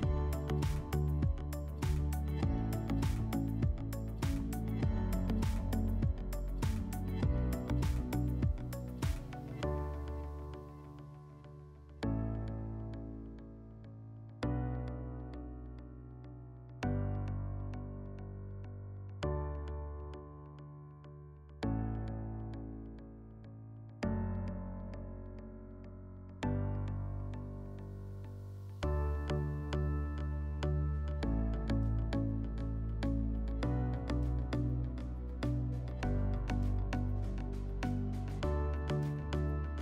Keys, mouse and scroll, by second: 0.3 alt+middle click, 6.0 click, 7.3 click, 8.6 click, 9.1 click, 10.2 click, 12.3 click, 12.4 click, 12.9-14.5 typing, 15.4 click, 16.0 typing, 16.6 click, 17.7 click, 18.0 click, 24.1 m, 26.5 click, 27.8 click, 33.6 click, 35.7 click, 36.6 click, 37.9 click.